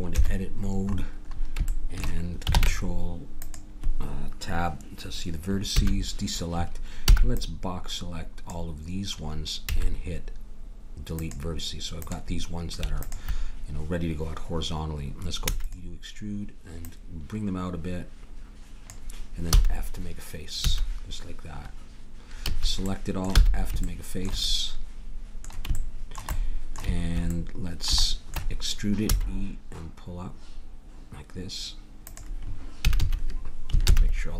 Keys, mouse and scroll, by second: 0.1 KP_7, 2.5 ctrl+Tab, 5.7 a, 7.1 b, 9.7 x, 12.0-15.4 drag, 15.4 e, 16.8-18.6 drag, 19.5 f, 20.6 a, 22.4 a, 23.3 f, 29.1 e, 32.8 a, 33.0 a, 33.8 ctrl+n.